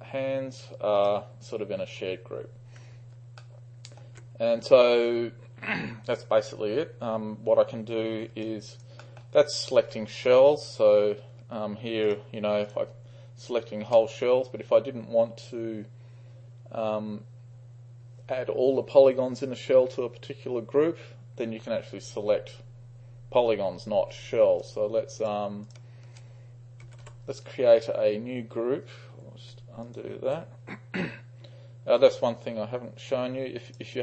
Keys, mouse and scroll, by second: 1.0 click, 3.5-4.1 alt+middle drag, 8.5-8.9 alt+right drag, 9.1 alt+middle click, 9.4-9.9 alt+drag, 12.1 shift+click, 12.7 shift+drag, 13.5-14.0 shift+drag, 24.7-26.2 shift+drag, 26.6-29.2 typing, 29.9 ctrl+click, 33.7-34.0 drag.